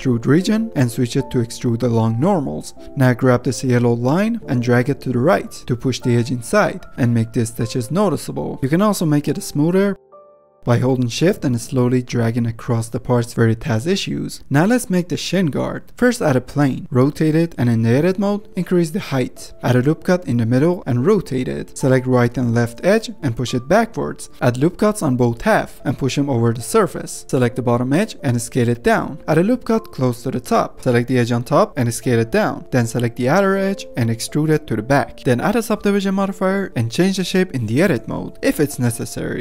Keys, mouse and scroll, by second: 0.7-2.1 drag, 2.9-3.9 middle drag, 3.9 click, 7.1 middle click, 7.4 ctrl+Tab, 7.9-8.4 scroll down 2, 8.4-9.7 middle drag, 10.3 ctrl+Tab, 10.5 shift+middle click, 11.3-12.9 drag, 13.3 x, 13.9 middle click, 14.3 F10, 15.1 shift+a, 15.9 r, 17.6-18.4 typing, 18.4 middle click, 19.5 g, 19.6 s, 19.8 ctrl+r, 20.7 middle click, 20.7 r, 21.2 g, 21.7 middle click, 22.1 click, 22.9 middle click, 23.2 g, 24.2 middle click, 24.7-25.2 scroll up 2, 25.2 middle click, 25.3 ctrl+r, 26.0 ctrl+r, 26.2 shift+click, 26.4 g, 27.2 middle click, 27.2 click, 27.9 s, 28.2 g, 29.0 ctrl+r, 29.9 s, 30.8 click, 31.3 s, 32.4 2, 32.4 ctrl+z, 32.7 alt+shift+click, 33.0 middle click, 33.5 alt+shift+click, 33.7 alt+shift+click, 34.0 middle click, 34.3 e, 35.1 click, 35.5 ctrl+1, 36.3 middle click, 36.5 g, 38.3 middle click, 38.6 ctrl+Tab.